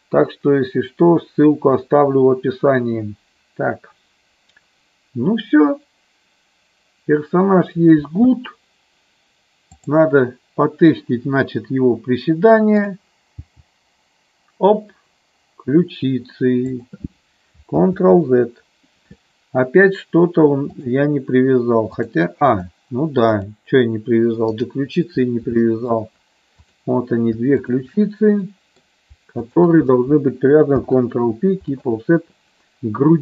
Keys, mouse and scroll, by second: 9.7-10.8 drag, 12.8 click, 13.3 g, 16.7 click, 18.1 ctrl+z, 20.7 click, 22.0 click, 23.4-24.7 drag, 25.7 shift+middle click, 26.6 click, 27.6 shift+click, 28.4 middle click, 29.4 shift+click, 30.7 ctrl+p.